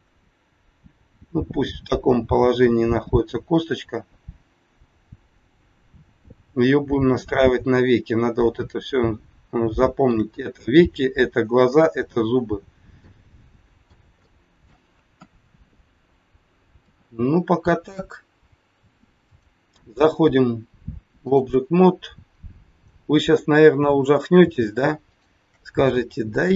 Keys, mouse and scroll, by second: 0.9 scroll up 2, 4.4-5.0 scroll up 1, 7.5-7.9 scroll down 2, 9.6 shift+middle click, 12.4 scroll down 2, 12.9 middle click, 14.2 shift+middle click, 15.0 KP_1, 16.8 KP_3, 19.3 click, 21.9 scroll up 3, 22.7 click, 23.6 scroll up 1, 25.0 shift+click, 26.4 scroll down 2.